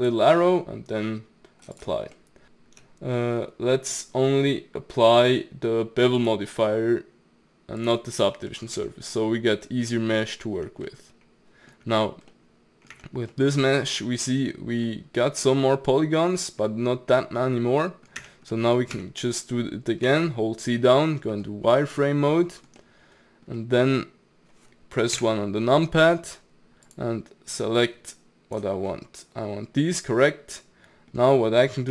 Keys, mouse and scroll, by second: 2.1 middle click, 2.4 ctrl+z, 3.2-6.2 middle drag, 6.2-8.5 drag, 8.5 middle click, 8.8 Tab, 9.2-10.3 middle drag, 10.3 scroll down 2, 10.6 Tab, 10.9-12.0 middle drag, 12.0-12.3 scroll up 1, 12.3-12.9 middle drag, 12.9 Tab, 13.3-18.2 middle drag, 18.2 Tab, 18.5 middle click, 18.9 Tab, 20.1 z, 21.7-25.1 middle drag, 25.1 KP_1, 26.9 click, 28.9-31.9 middle drag.